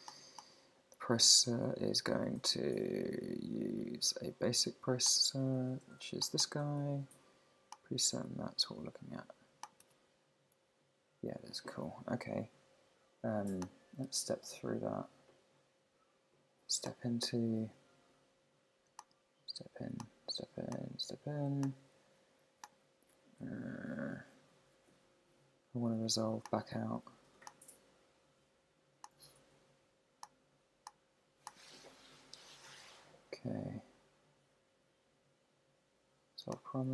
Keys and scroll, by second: 8.4 super+`.